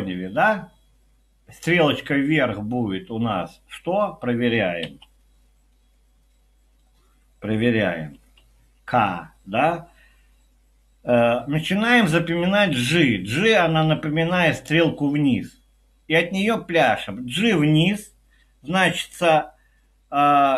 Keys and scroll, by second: 4.8 Escape, 4.8 typing, 8.2-8.8 typing.